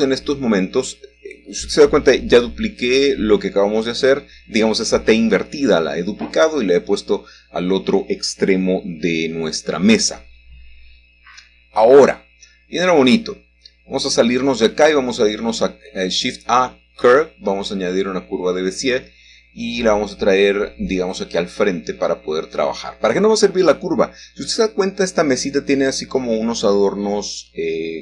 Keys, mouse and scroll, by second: 2.1 middle click, 6.4 middle click, 6.7-7.3 scroll up 2, 8.0-9.3 shift+middle drag, 10.9-12.2 scroll down 2, 12.2 middle click, 12.9-13.5 scroll down 2, 13.2 middle click, 15.6 Tab, 16.6 shift+a, 19.0 click, 20.6 shift+z, 22.0 click, 23.3 middle click, 23.6-25.0 scroll up 1, 27.0 r.